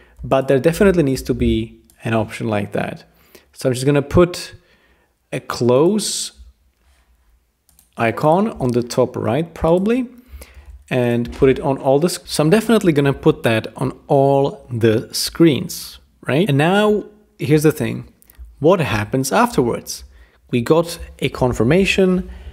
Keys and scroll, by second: 1.1 super+g, 10.6 super+c, 11.4 super+v, 11.5 super+v.